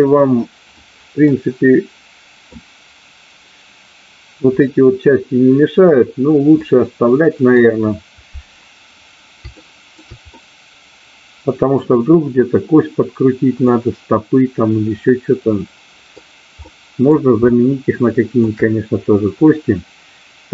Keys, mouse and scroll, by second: 1.2-2.5 middle drag, 6.6-7.6 middle drag, 9.5 shift+middle click, 10.3-11.7 middle drag, 13.7-16.1 middle drag, 16.7 middle click, 17.3-18.3 shift+middle drag, 19.3-20.5 middle drag.